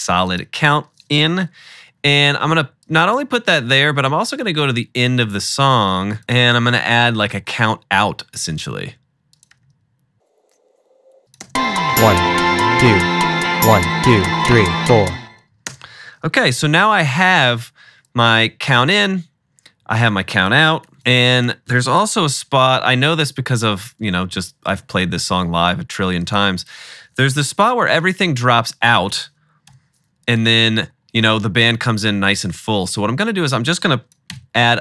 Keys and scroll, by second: 1.5-2.8 typing, 8.9 super+v, 9.6-11.5 typing, 12.4 super+s, 15.8-17.0 typing, 22.2 =, 22.3 =, 22.4 =, 22.6 =, 26.7 alt+=, 27.4 =, 27.6 =, 29.7 =, 34.4 BackSpace.